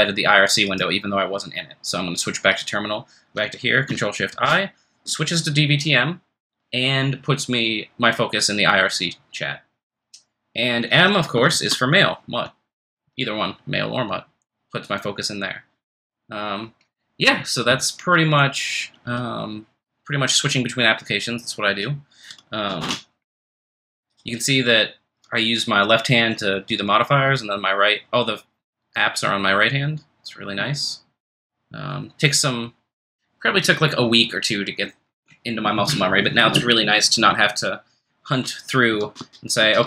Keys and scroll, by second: 4.3 ctrl+f, 4.4 2, 11.5 ctrl+f, 13.2 3, 22.8 super+Return, 39.0 super+Tab, 39.2 super+Tab, 39.6 super+Tab.